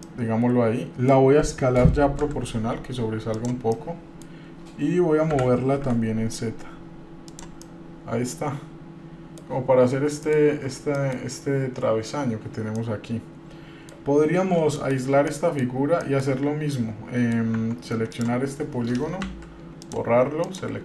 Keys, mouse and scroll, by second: 0.3-1.3 middle drag, 2.4 s, 3.9 middle click, 5.5 g, 7.8-8.9 middle drag, 8.9 click, 9.0 middle click, 10.0-10.8 scroll down 3, 10.4 middle click, 11.2 middle click, 11.4-12.1 scroll down 1, 13.0-14.1 middle drag, 15.5 middle click, 15.9 scroll down 1, 16.2 middle click, 16.9 middle click, 17.8 Tab, 18.3 click, 19.4 Delete, 20.6 click.